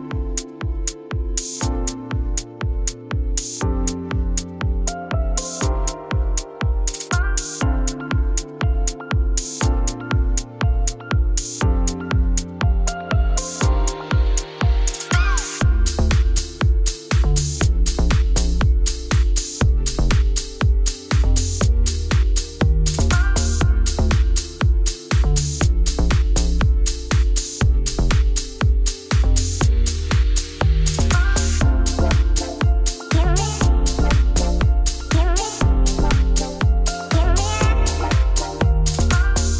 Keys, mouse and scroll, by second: 0.0 3, 0.2 click, 0.6 shift+s, 0.7 Tab, 1.0 middle click, 1.2 scroll up 1, 1.4-4.5 middle drag, 5.7 click, 6.0 Tab, 6.3 1, 10.9 middle click, 11.1 s, 11.4 shift+middle click, 11.6 s, 13.4 click, 14.7 g, 16.6 middle click, 16.9 a, 18.2 shift+n, 18.8-20.1 middle drag, 20.1 g, 22.3 click, 23.4 click, 23.9 Tab, 24.5 right click, 25.2 click, 25.8 middle click, 26.3 click, 26.4 Tab, 26.9 g, 27.9-29.1 middle drag, 29.1 Tab, 30.9 shift+a, 31.3 Tab, 31.4 s, 32.6 middle click, 33.5 g, 35.3 Tab, 35.4 g, 38.0 middle click, 38.2 Tab, 38.3 2, 38.5 Left, 38.7 g.